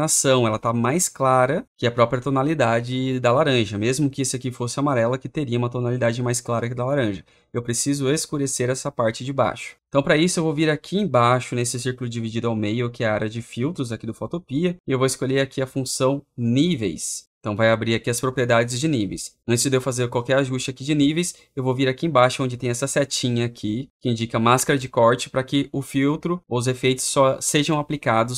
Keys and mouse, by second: 25.0-26.1 drag.